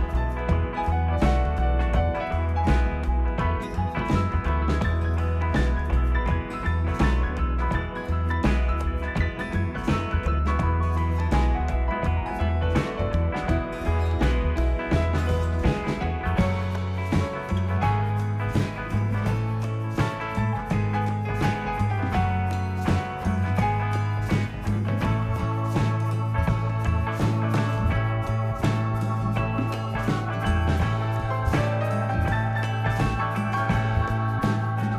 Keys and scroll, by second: 19.6 9, 20.2 0, 22.9-24.0 typing, 27.5-28.5 typing.